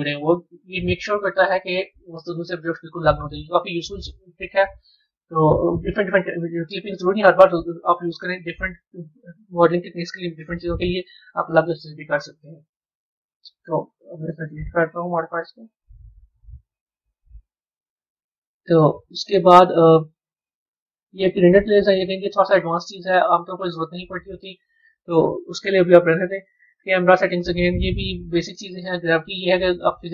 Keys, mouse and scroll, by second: 12.5 click, 13.4-16.4 drag, 16.4-19.1 right drag, 19.1 click, 20.0 scroll up 1, 25.7 click.